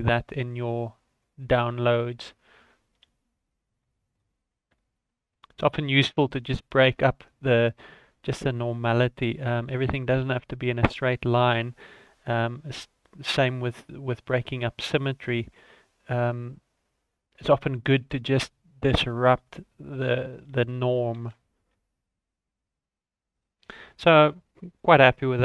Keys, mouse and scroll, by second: 0.0 shift+middle click, 0.4 right click, 0.8 click, 1.4-1.9 scroll down 10, 1.9 shift+middle click, 3.1 shift+d, 4.3-4.7 scroll up 6, 4.8 shift+middle click, 5.2-6.0 scroll up 5, 6.1 shift+middle click, 6.9 g, 8.7-9.1 scroll down 9, 9.2 shift+middle click, 9.6 right click, 9.9 click, 10.9-11.5 scroll up 1, 11.5 g, 12.2 scroll up 3, 12.5 shift+middle click, 12.8-13.4 scroll up 2, 13.4 click, 14.6 shift+middle click, 15.3 g, 17.9 scroll down 4, 18.2 shift+middle click, 19.0 click, 20.4 r, 21.6 g, 23.6 scroll down 3, 23.9 shift+middle click, 24.8 right click.